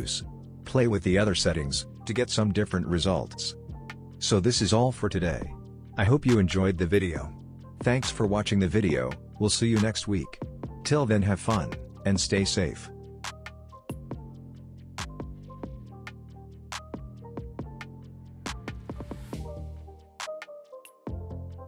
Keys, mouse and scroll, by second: 1.1-2.5 scroll down 1, 2.5-3.9 scroll up 1, 6.1 space, 6.7 click, 10.7 space.